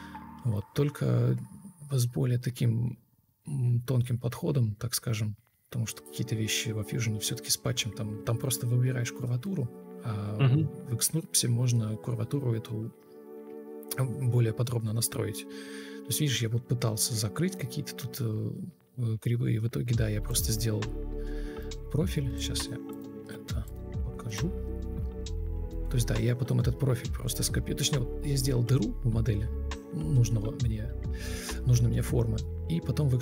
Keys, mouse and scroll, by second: 26.2 Left, 26.3 Left, 31.6 Escape.